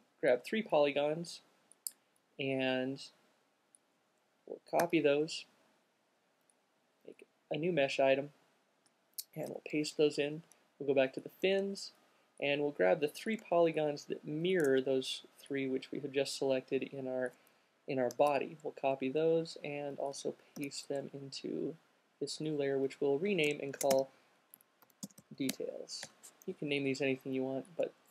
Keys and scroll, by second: 4.3 super+c, 9.6 super+v, 18.4 super+c, 20.4 super+v, 23.8-26.3 typing.